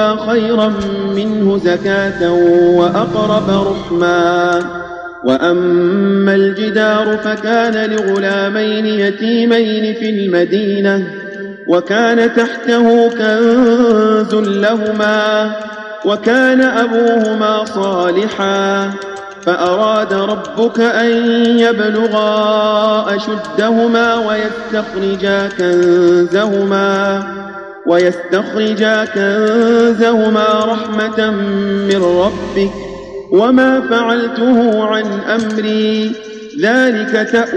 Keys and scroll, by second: 3.8 ctrl+a, 8.1 space, 14.2 space, 16.6 space, 17.6 space, 19.0 space, 19.9 space, 21.4 space, 23.4 space, 25.5 space, 27.9 space, 29.4 space, 31.8 space, 34.5 ctrl+a.